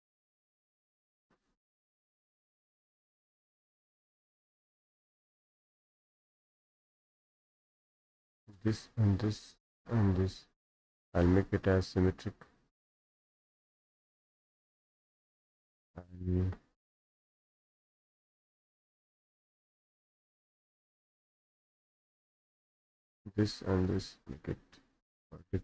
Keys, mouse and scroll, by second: 0.0 click, 0.5 Escape, 1.9 click, 2.8 Delete, 4.4-5.6 drag, 7.2 click, 7.4 Escape, 7.7 Escape, 8.6-12.3 drag, 13.7 click, 14.9 click, 16.1 click, 17.3-18.4 drag, 18.7 click, 19.5 click, 19.7 Escape, 19.9 scroll up 2, 20.0 Escape, 20.2 middle click, 20.5 Escape, 22.5 click, 22.9 click, 23.4-24.4 drag, 25.4 click.